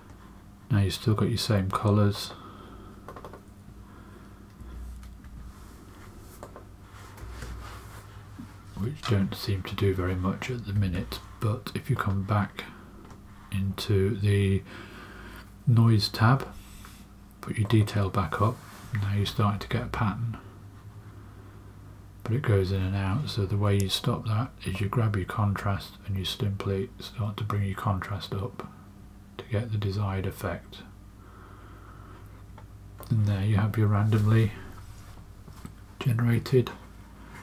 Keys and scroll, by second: 4.9-5.7 typing, 7.1 space, 10.7 space, 19.5 space.